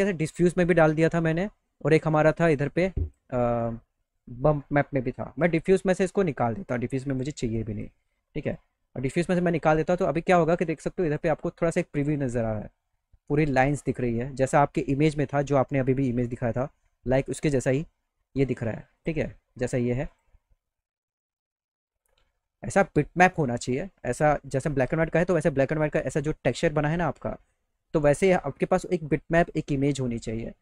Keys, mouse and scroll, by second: 2.0-3.1 drag, 6.3 click, 7.6 click, 8.5 right click, 9.2 right click, 10.5-11.2 scroll up 3, 16.5 click, 19.0 click, 19.6 click, 20.1 click.